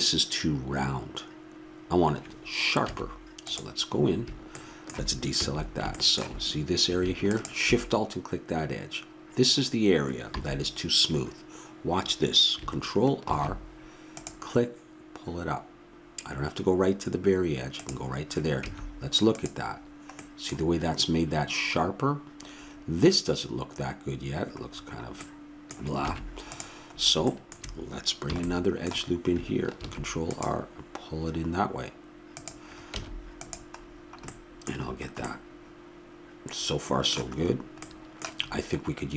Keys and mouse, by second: 2.8 Tab, 5.4 a, 7.2-9.1 drag, 10.4 a, 13.2 ctrl+r, 18.6 Tab, 26.0 Tab, 28.3 a, 29.8 ctrl+r, 33.0 Tab.